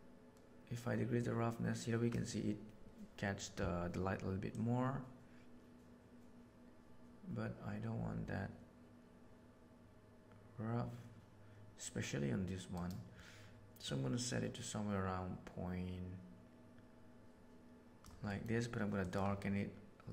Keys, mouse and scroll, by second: 1.6 click, 4.4-12.9 drag, 13.8-18.0 drag, 18.2 middle click, 19.0 click.